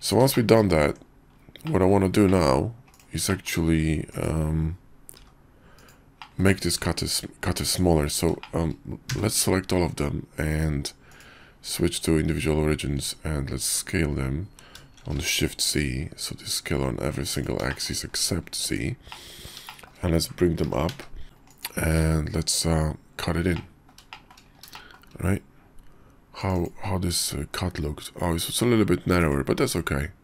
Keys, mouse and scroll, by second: 0.2 shift+middle click, 0.8 Tab, 1.6 click, 1.6 middle drag, 1.8 drag, 2.2 click, 4.1 middle click, 5.2 g, 6.2 drag, 6.5 `, 7.7 Tab, 8.4 shift+click, 9.1 a, 11.2-12.0 drag, 12.9 s, 17.8 shift+click, 18.6 Tab, 19.1 click, 19.7 shift+middle click, 20.6 g, 22.0 q, 22.7 click, 23.5-23.9 middle drag, 24.1 shift+middle click, 24.7 shift+middle drag.